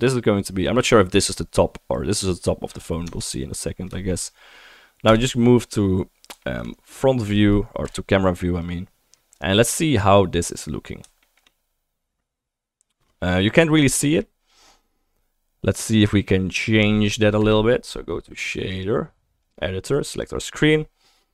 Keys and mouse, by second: 2.4-3.4 right drag, 3.3 Tab, 3.4-4.0 drag, 4.0 shift+middle click, 4.2 click, 4.4 middle click, 4.6 click, 4.7 middle click, 5.1 KP_0, 5.6-6.0 right drag, 6.0-6.5 middle drag, 6.5 shift+right click, 6.6 middle click, 6.7-11.3 right drag, 7.9 KP_0, 8.6 click, 8.6 middle click, 11.3 shift+middle click, 11.4 right click, 11.5 middle click, 11.6-13.4 right drag, 13.4 middle click, 13.6 right click, 13.7-17.9 right drag, 17.4 KP_0, 17.9-21.3 drag, 18.7-20.2 middle drag, 18.7-20.2 right drag.